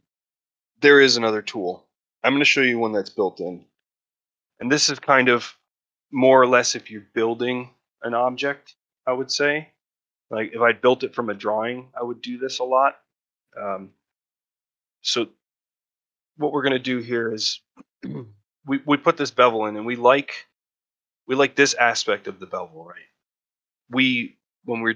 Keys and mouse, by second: 10.8 ctrl+middle click, 11.2 shift+middle click, 12.9 shift+middle click, 14.5 middle click, 15.0 shift+middle click, 15.4 middle click, 16.4 ctrl+middle click, 17.2 ctrl+middle click, 17.8 middle click, 19.3 middle click, 19.7 ctrl+middle click, 20.0 middle click, 22.5 middle click.